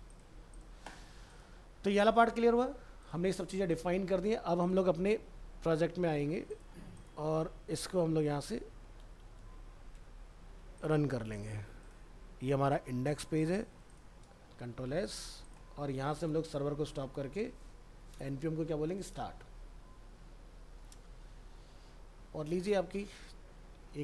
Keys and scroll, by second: 7.7 ctrl+s, 8.1 ctrl+w, 8.3 ctrl+s, 8.4 ctrl+w, 8.6 ctrl+s, 8.9 ctrl+w, 9.0 ctrl+s, 9.2 ctrl+w, 9.4 ctrl+s, 9.9 ctrl+w, 14.6 ctrl+s.